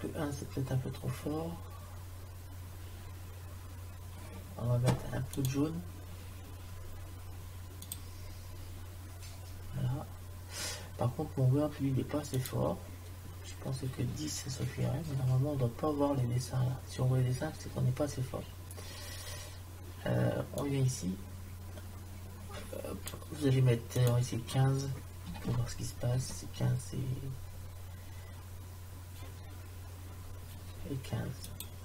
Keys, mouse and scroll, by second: 21.0 click, 24.0-25.5 drag, 31.6 click.